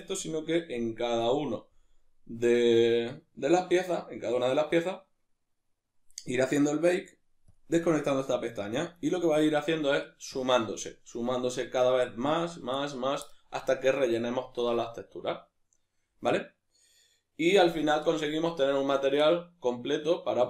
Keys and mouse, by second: 7.5 click.